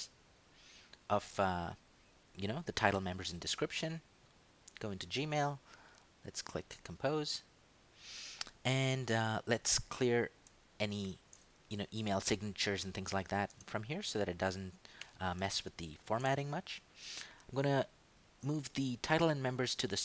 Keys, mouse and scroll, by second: 4.9 click, 6.9 click, 10.0 ctrl+click, 11.0 ctrl+shift+End, 11.7 ctrl+shift+BackSpace, 13.3 ctrl+shift+v, 15.0 Home, 15.6 ctrl+shift+Right, 18.2 click.